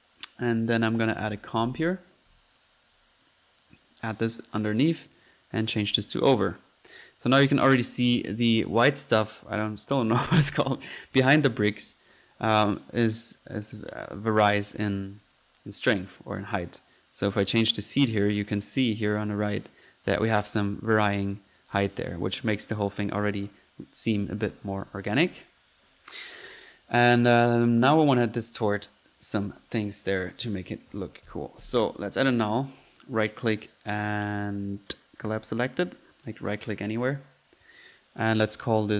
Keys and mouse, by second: 0.0-2.3 typing, 0.6 right click, 0.9 click, 1.1 click, 2.6 click, 3.6-4.5 drag, 4.8 click, 5.4-6.2 drag, 7.2 click, 7.3-8.1 typing, 7.8 drag, 11.9 Escape, 12.5-13.2 typing, 13.5 click, 14.8-15.2 middle drag, 15.2 click, 15.4-15.9 drag, 17.2-18.4 drag, 19.3-21.7 drag, 21.8 F1, 25.2 Escape, 25.9-26.4 drag, 26.4-27.1 typing, 26.9-27.2 drag, 27.3 drag, 28.3 click, 29.2 click, 30.0 right drag, 30.4 click, 30.7-31.8 typing, 32.0 drag, 32.4 click, 32.8-33.2 drag, 33.2-33.5 right drag, 35.3 drag, 35.9 click, 36.6 right drag, 37.0 drag, 38.4 click.